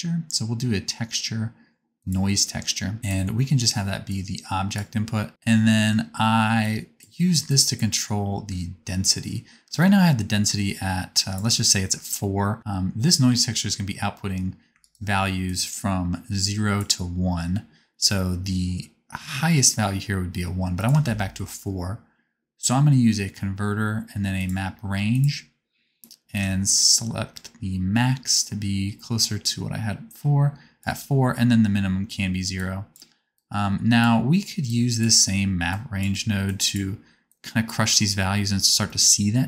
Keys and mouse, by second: 3.0-10.3 drag, 3.0-10.3 right drag, 21.0 shift+a, 21.3-26.3 drag.